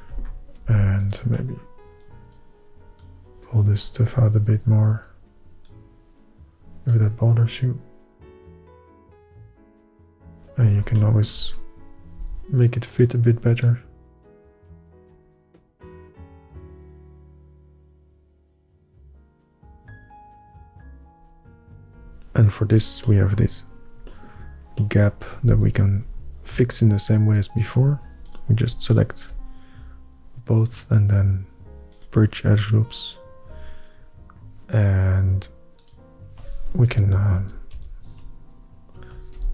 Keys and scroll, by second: 12.3 f, 15.7 f, 16.6 f, 18.4 ctrl+Tab, 19.6 alt+a, 22.1 h, 25.7 Tab, 26.6 é, 36.9 ctrl+KP_Add, 37.5 ctrl+KP_Add, 37.9 ctrl+KP_Add.